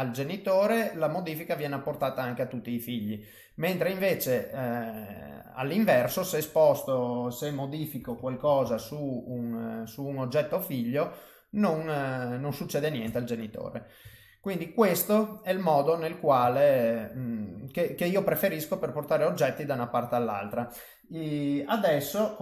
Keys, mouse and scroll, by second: 0.5 middle click, 3.8 click, 4.6 click, 5.1 middle click, 7.9 g, 11.1 middle click, 12.4 middle click, 13.0 Tab, 13.4 middle click, 14.0 Tab, 14.3 middle click, 14.9 click, 15.4 middle click, 16.5 ctrl+middle click, 19.4 middle click.